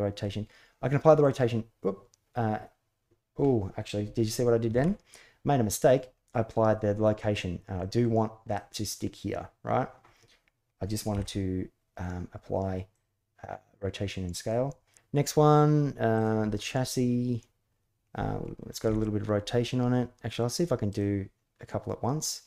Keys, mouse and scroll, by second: 4.7 ctrl+z, 7.5 middle click, 10.9 ctrl+a, 16.3-16.7 middle drag.